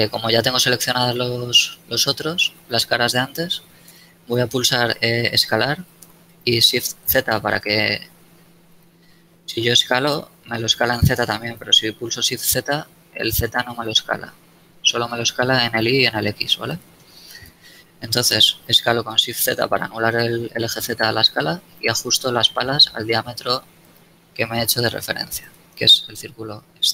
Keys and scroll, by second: 4.2 KP_7, 6.2 s, 6.8 shift+z, 12.2 shift+z, 18.5 s, 19.2 shift+z, 24.5 Tab.